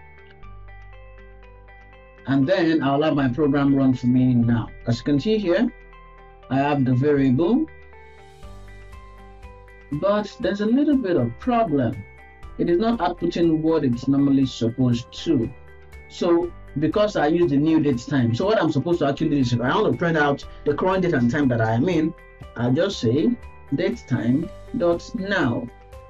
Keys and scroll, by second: 25.6 Return.